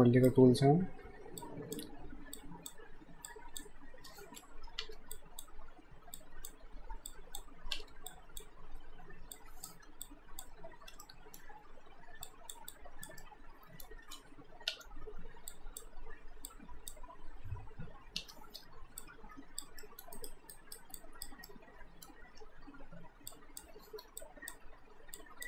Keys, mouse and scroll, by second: 1.4 shift+click, 4.9 shift+Return, 5.1 shift+click, 7.7 Return, 8.1 click, 10.0 alt+shift+click, 11.0 alt+middle click, 12.3 click, 12.7 alt+click, 13.2 alt+middle click, 14.7 Return, 15.5 click, 18.2 Return, 19.0 alt+click, 19.8 alt+middle click, 20.2 alt+right click, 21.0 alt+click, 21.5 alt+middle click, 23.3 click.